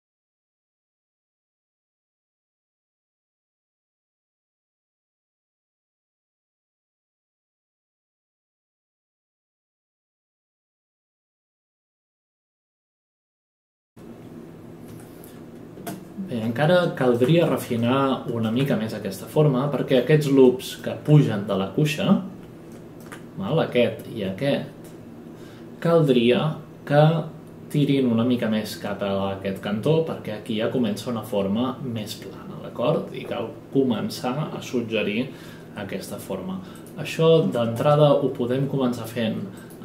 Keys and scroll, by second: 1.1 space, 1.2 space, 10.0 ctrl+space, 10.3 ctrl+space, 12.0 ctrl+space, 12.3 ctrl+space, 12.8 ctrl+space, 13.4 F8.